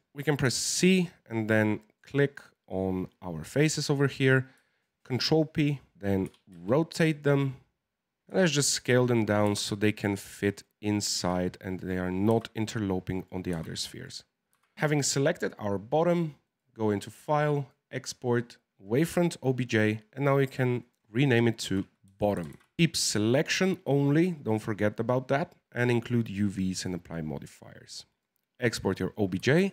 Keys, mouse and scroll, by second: 0.1 c, 0.4 c, 5.9 scroll down 1, 6.2 r, 8.3 s, 9.4 g, 11.1 s, 12.2 g, 13.5 s, 14.5 g, 14.7 Tab, 16.4-19.5 drag.